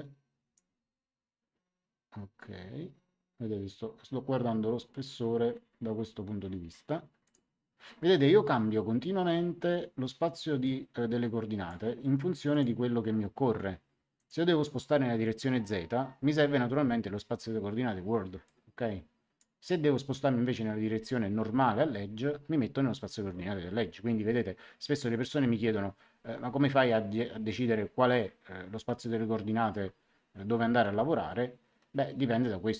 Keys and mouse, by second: 7.2 click, 10.6 click, 12.4 click, 14.1 click, 18.4 click, 29.8 Escape.